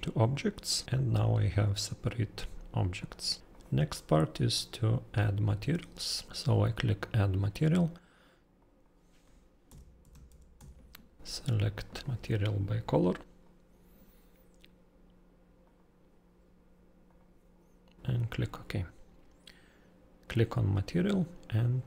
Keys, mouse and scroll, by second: 0.3 click, 0.8 click, 3.0 click, 3.5 click, 7.0 click, 8.6 click, 9.2-11.3 typing, 11.7 click, 12.8 click, 17.0 click, 18.0 click, 20.5 click.